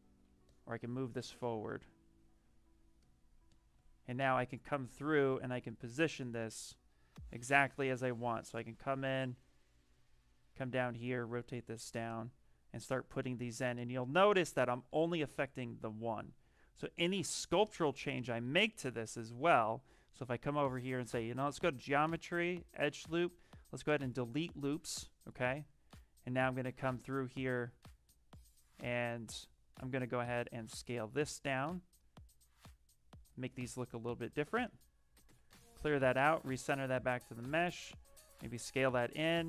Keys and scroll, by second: 0.2 z, 17.3 q, 18.3 w, 25.2 q, 26.5 w, 33.1 q, 34.3 w, 38.2 q, 39.1 b.